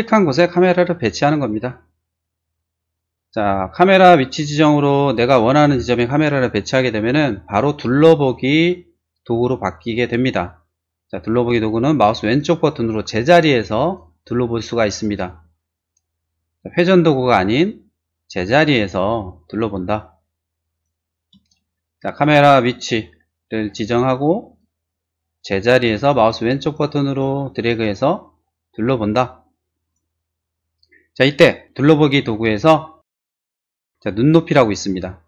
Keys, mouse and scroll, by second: 1.1 click, 3.4-8.1 middle drag, 12.0 click, 12.2 right click, 12.5 middle click, 13.7 middle click, 13.9 click, 14.2-15.8 drag, 16.8-18.6 middle drag, 19.0-20.8 drag, 21.5-22.6 shift+middle drag, 25.7 click, 26.1 click, 26.5 click, 27.0 click, 27.1 right click, 27.5 click, 27.9-29.4 drag.